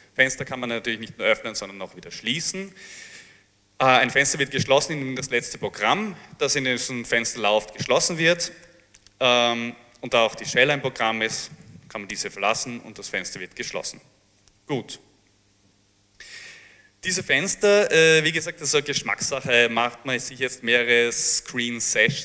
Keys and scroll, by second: 8.0 BackSpace, 8.2 BackSpace, 8.2 BackSpace, 8.4 BackSpace, 10.9-12.1 typing, 12.2 Return.